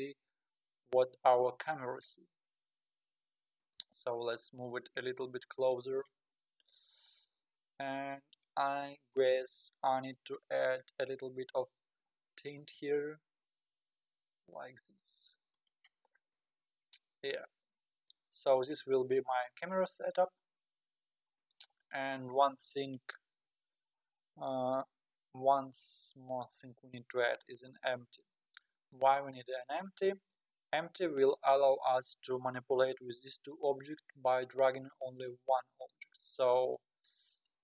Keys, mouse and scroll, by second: 1.3-3.8 middle drag, 3.8 g, 6.4-7.4 scroll down 4, 9.1-12.6 drag, 12.6 g, 16.0-16.7 scroll up 3, 16.7-17.1 scroll down 1, 17.1-19.1 scroll up 1, 19.1-20.7 scroll up 1, 20.7-21.6 scroll down 10, 27.7 click, 28.3-29.0 scroll up 2, 29.0-29.8 middle drag, 29.8 shift+a, 32.2 shift+a, 34.0-34.5 scroll up 4, 34.5-35.3 scroll down 3, 35.3-36.3 middle drag, 36.3-36.8 scroll down 4, 36.8-37.6 middle drag.